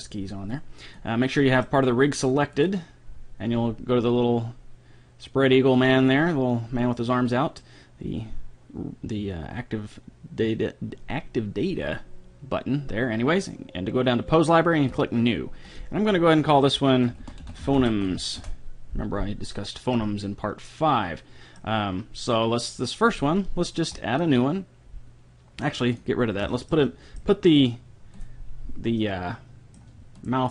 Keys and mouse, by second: 0.5-3.2 drag, 1.4 middle click, 2.1-4.5 right drag, 14.9-17.4 drag, 20.0-21.0 middle drag, 21.1 middle click, 21.6 click, 23.2-25.0 drag, 25.9-27.2 drag, 26.9 right click, 28.8 right click.